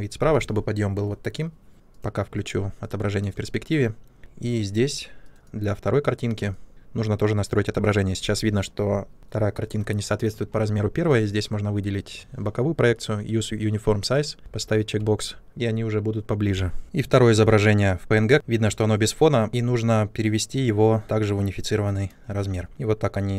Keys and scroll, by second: 14.4 shift+a.